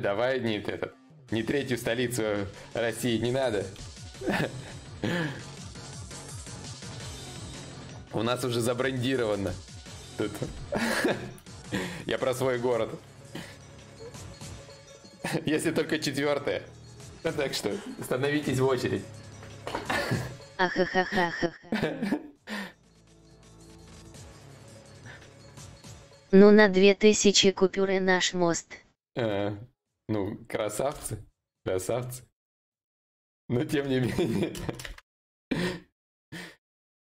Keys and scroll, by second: 30.5 Return, 35.1 alt+Tab.